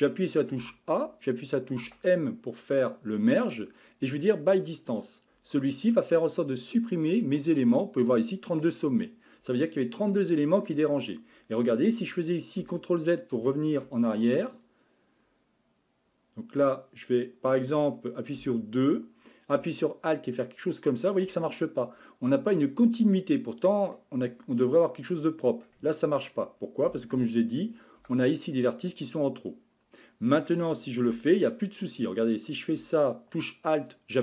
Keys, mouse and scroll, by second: 0.6 a, 1.8 m, 10.2-12.6 middle drag, 12.6 ctrl+z, 13.4 ctrl+z, 14.5 click, 18.4 2, 20.3 alt+click, 22.5-26.9 middle drag, 26.9 a, 27.2 a, 28.0 m, 33.4 a, 33.9 alt+click.